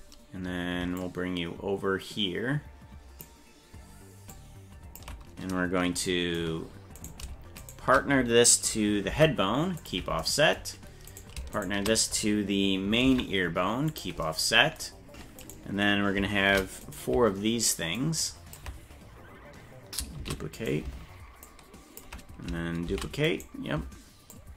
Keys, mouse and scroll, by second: 1.0-3.2 ctrl+drag, 4.3 ctrl+click, 7.0 right click, 7.6 shift+right click, 9.1 ctrl+p, 11.1 right click, 11.6 shift+right click, 13.0 ctrl+p, 15.4 right click, 16.5 shift+d, 17.9 ctrl+click, 20.2 shift+d, 21.4 ctrl+click, 22.9 shift+d, 24.3 ctrl+click.